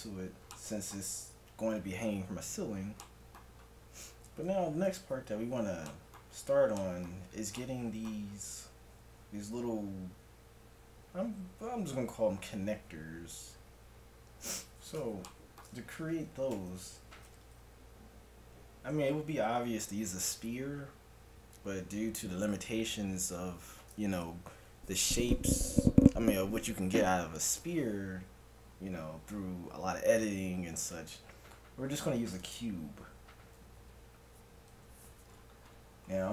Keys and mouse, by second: 4.5 KP_1, 7.8-11.0 middle drag, 14.4-19.8 middle drag, 16.6 shift+a, 34.7 KP_Decimal, 36.1 g.